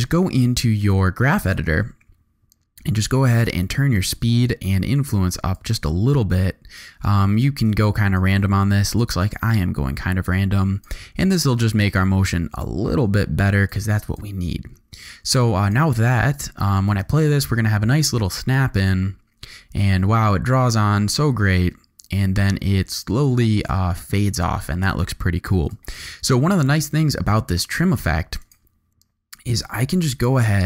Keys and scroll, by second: 16.9 space, 25.6 space.